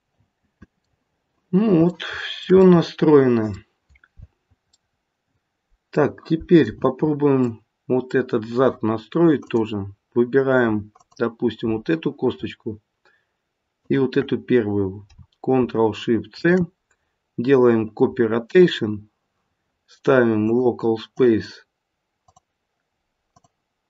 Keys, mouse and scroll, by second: 0.2 middle click, 1.9 shift+middle click, 2.6 middle click, 4.7 middle click, 5.2 shift+middle click, 9.3 click, 10.9 click, 13.7 shift+click, 16.3 ctrl+shift+c, 20.4 click, 22.2 click.